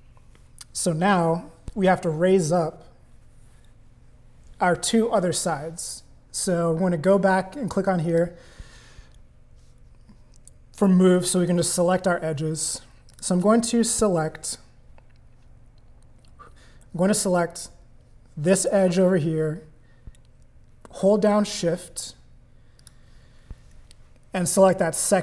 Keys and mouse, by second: 8.1 click, 13.1 click, 22.8 shift+click.